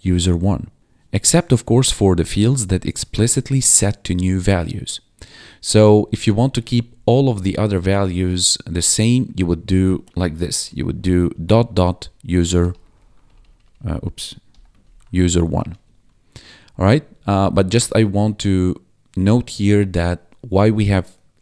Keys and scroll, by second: 6.0 ctrl+Right, 8.5 Right, 10.4 ,, 10.6 Return, 11.3 ., 12.3-15.6 typing, 15.8 Escape, 17.0 Up, 17.1 Left.